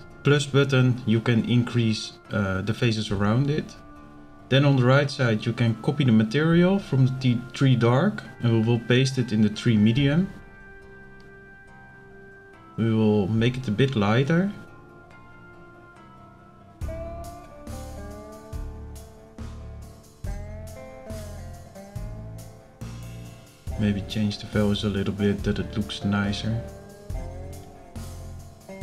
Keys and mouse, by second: 3.9-4.6 drag, 6.7 click, 7.5-8.7 drag.